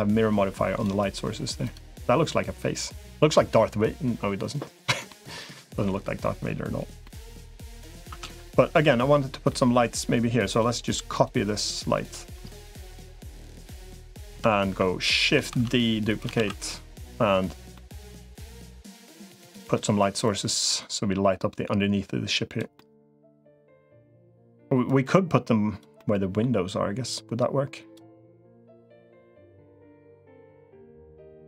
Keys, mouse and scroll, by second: 1.5 click, 4.9 middle click, 6.8 middle click, 7.9 Tab, 8.6 middle click, 9.3 middle click, 10.9 click, 11.7 middle click, 12.7 KP_1, 14.1 KP_3, 15.5 shift+d, 16.3 ctrl+s, 16.5 middle click, 17.5 middle click, 19.0 middle click, 20.1-22.5 drag, 22.6-23.8 middle drag, 24.7-25.7 drag, 25.8 middle click, 26.9-27.9 drag, 28.7 click, 29.5 middle click, 30.7 click.